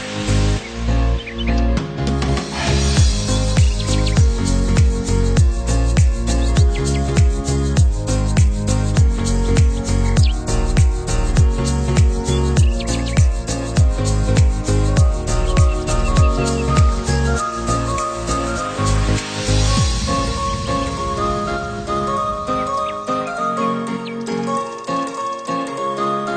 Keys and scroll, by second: 4.0 Up, 8.8 ctrl+p, 9.7 ctrl+-, 14.0 ctrl+0, 20.8 ctrl+c, 21.0 ctrl+v.